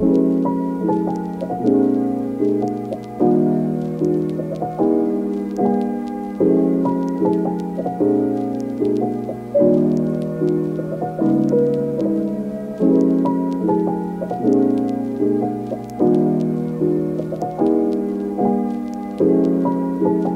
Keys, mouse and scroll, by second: 1.0 click, 1.3 click, 2.1 click, 2.2 click, 3.9 click, 4.3 click, 5.1 g, 6.4 shift+click, 8.4 click, 9.3 ctrl+z, 9.4 click, 11.4 click, 11.9 click, 12.1 click, 12.7 shift+middle click, 13.1 click, 13.3 middle click, 14.1 middle click, 14.3 middle click, 15.8 middle click, 16.2 middle click, 16.7 click, 16.9 click, 17.3 click, 18.1 shift+click, 19.0 click, 19.3 click, 20.0 click.